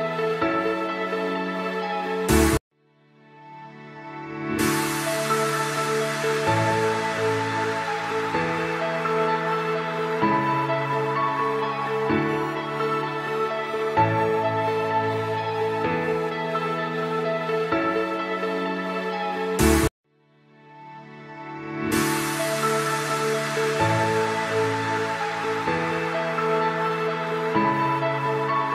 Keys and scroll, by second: 4.0 Escape, 11.1 F3, 11.6 F2, 14.6 Escape, 15.8 ctrl+z, 19.6 F3, 27.0 F2, 27.8 space.